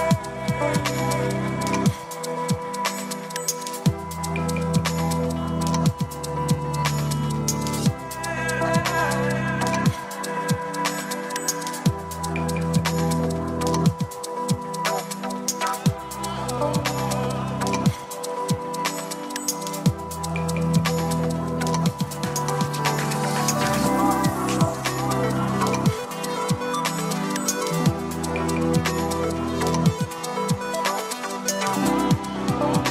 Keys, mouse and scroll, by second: 0.6-2.5 drag, 2.8-3.5 scroll down 1, 3.8-6.9 scroll down 1, 9.6 click, 16.3-18.6 scroll down 1, 21.3-26.5 drag, 27.7 click, 29.6 s, 30.1-31.1 s, 31.1 click, 31.1 s, 31.2 s.